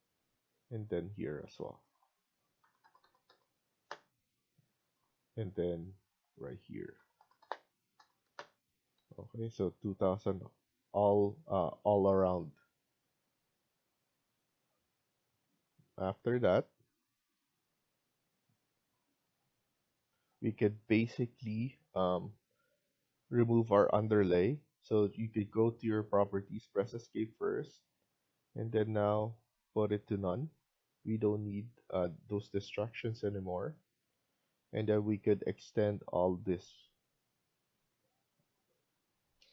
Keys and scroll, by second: 2.2-3.0 typing, 3.7 Return, 3.9 Escape, 4.2 Escape, 4.5-5.2 typing, 6.6-7.4 typing, 8.1 Return, 8.6 Escape, 8.9 Escape, 39.3 F1.